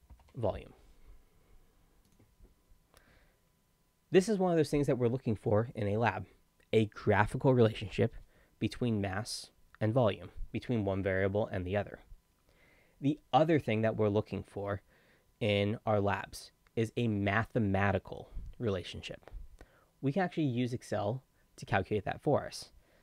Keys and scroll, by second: 0.1 ctrl+m, 0.2 ctrl+e.